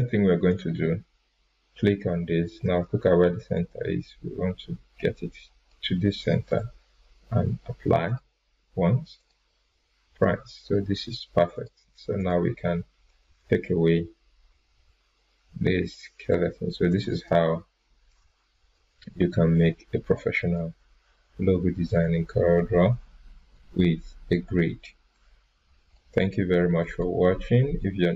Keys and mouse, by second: 0.5 click, 3.5-5.7 drag, 8.1 click, 11.5 click, 17.2 right click, 18.1-19.0 drag.